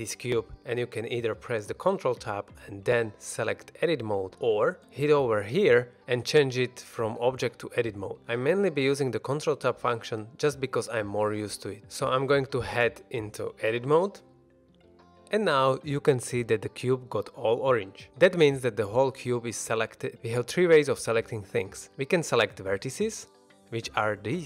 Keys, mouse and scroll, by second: 1.5 ctrl+Tab, 5.6-8.1 drag, 8.4 ctrl+Tab, 12.0 shift+middle click, 12.4 ctrl+Tab, 14.3 middle drag, 14.8-15.3 scroll up 1, 20.2 a.